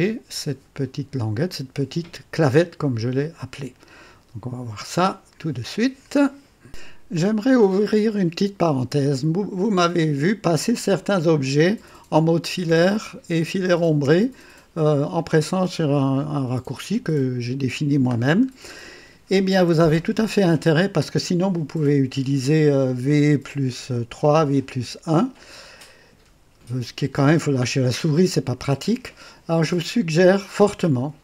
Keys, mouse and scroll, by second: 2.3-5.3 drag, 7.2-9.2 drag, 9.6 right click, 10.7 click, 11.8-14.0 typing, 16.3-16.9 typing, 18.2 scroll down 1, 18.7-20.8 drag.